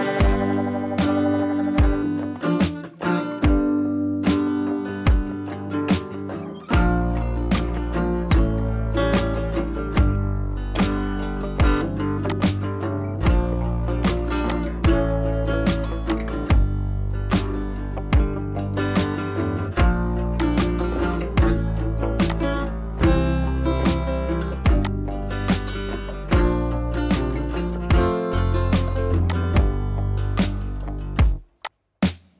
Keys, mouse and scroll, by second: 2.2-3.7 drag, 5.8 ctrl+i, 6.9 scroll up 1, 8.6-9.8 typing, 12.3-12.9 drag, 19.4 [, 19.7 [, 20.4-21.2 click, 21.2 scroll up 1, 22.2-23.5 drag, 23.6 [, 23.8 [, 24.8-27.6 drag, 27.8 scroll down 1, 29.1 space, 29.2-29.8 click, 29.6 space, 29.9 scroll down 1, 30.8 ctrl+z, 31.2 scroll up 1, 31.4 space, 31.6-32.2 click, 32.0 space, 32.2 scroll up 1.